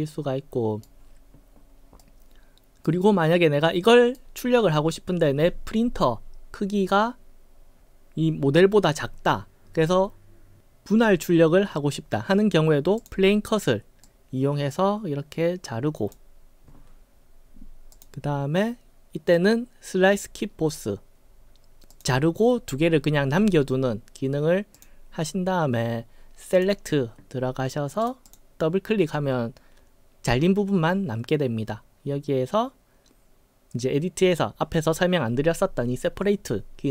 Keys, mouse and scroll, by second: 2.0-2.9 right drag, 3.3-3.7 middle drag, 3.9-4.2 right drag, 13.0 click, 14.1-16.1 drag, 17.9 click, 21.9 click, 24.7 click, 28.0 click, 28.2 click.